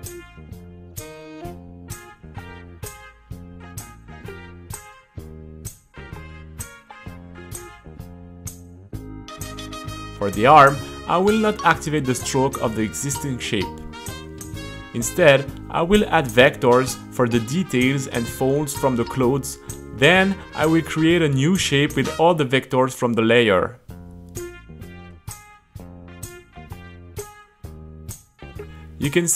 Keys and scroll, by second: 0.1 t, 0.5 q, 1.3 q, 4.4-7.0 typing, 8.1 b, 8.4 c, 9.0 t, 9.7 c, 16.3 u, 22.3 super+a, 26.8 space.